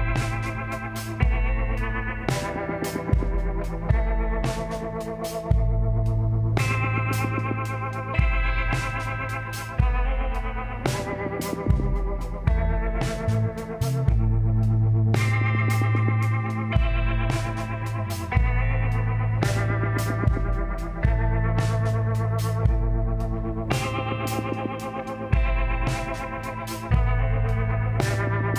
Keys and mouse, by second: 2.5 click, 3.3 ;, 3.6 l, 4.4 middle click, 5.6 r, 8.4 r, 11.1 g, 15.9 s, 21.1 z, 25.8 a.